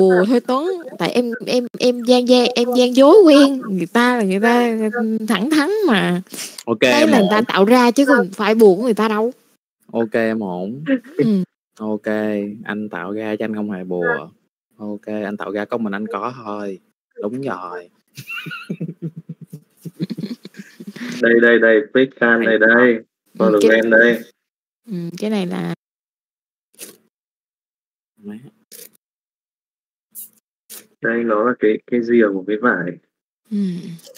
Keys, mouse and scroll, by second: 1.1 right click, 2.0 middle click, 2.6 alt+a, 3.0-4.5 right drag, 5.1 middle click, 6.6 KP_Divide, 8.5 click, 9.2 middle click, 10.3 KP_Divide, 11.4 middle click, 11.7 scroll down 1, 12.7-13.0 shift+middle drag, 19.6 middle click, 20.7 shift+middle drag, 23.6 KP_Divide, 24.7 KP_Divide, 28.4 click, 30.4 click, 33.1 shift+middle click, 33.9 click.